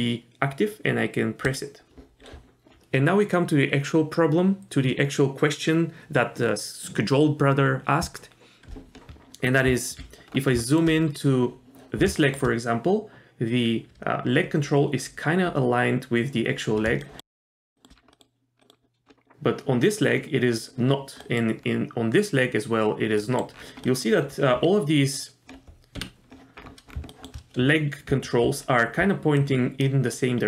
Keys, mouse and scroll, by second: 1.4 click, 9.7 z, 10.3-11.9 scroll up 3, 10.7 shift+middle drag, 12.2 shift+middle drag, 17.0 shift+middle click, 17.3 scroll up 1, 17.4 middle click, 17.7 shift+middle drag, 17.9 scroll down 1, 18.1 middle click, 18.6 middle click, 21.2 middle click, 21.7 scroll up 1, 23.2 middle drag, 23.6-24.6 scroll down 3, 23.9 middle click, 26.0 KP_Divide, 26.6-27.0 scroll up 3, 27.1 shift+middle drag, 28.1-30.4 typing, 29.4-29.8 drag, 30.1-30.4 drag.